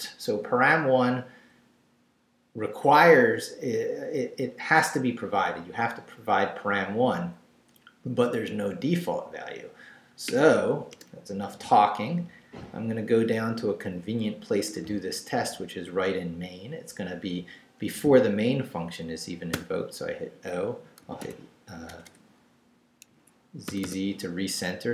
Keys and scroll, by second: 10.9 Return, 11.8 Down, 15.1 Up, 19.5 o, 21.0 z, 21.9 BackSpace, 23.1 Escape, 23.7 z.